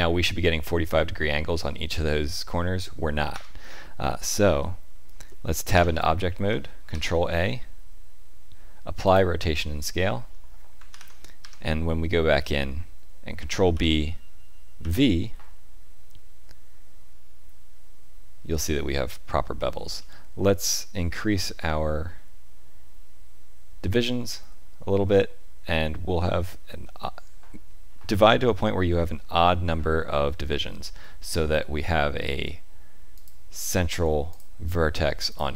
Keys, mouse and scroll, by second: 4.6 middle click, 5.7 Tab, 6.9 ctrl+a, 10.9 ctrl+KP_7, 11.4 Tab, 13.7 ctrl+b, 34.3 click, 35.3 click.